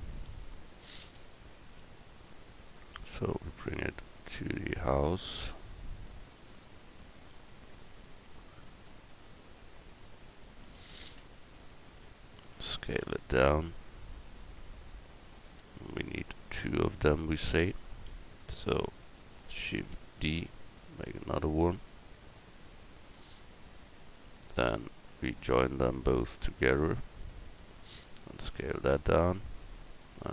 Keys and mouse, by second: 0.4 middle click, 2.8-4.1 middle drag, 4.1-7.0 drag, 7.0-8.6 middle drag, 8.6-10.1 drag, 10.1 middle click, 11.1 KP_Decimal, 14.5 s, 17.1 middle click, 18.4 click, 19.8 shift+d, 20.9-21.5 drag, 24.7-25.9 right drag, 27.9 s.